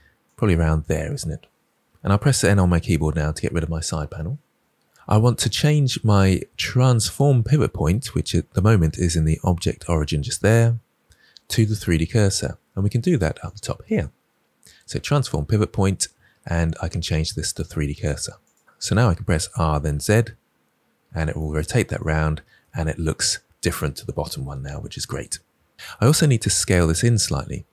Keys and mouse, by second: 0.2 shift+click, 2.4 n, 13.5-18.5 drag, 19.3 r, 19.9 z, 21.5 click.